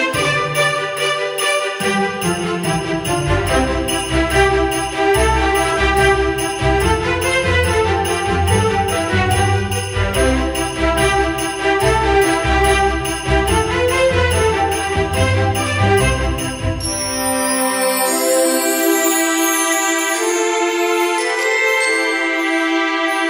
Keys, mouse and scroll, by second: 19.8 Caps_Lock.